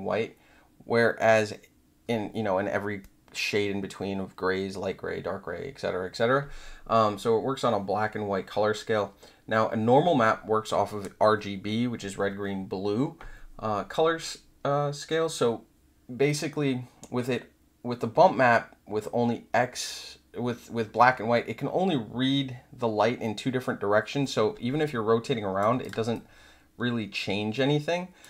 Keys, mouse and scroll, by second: 24.8 alt+click, 25.8 click, 26.1-28.2 alt+drag.